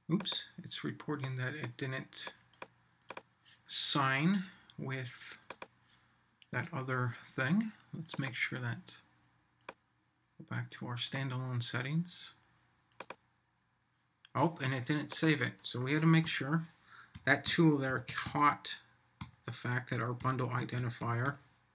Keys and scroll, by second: 16.2 Right.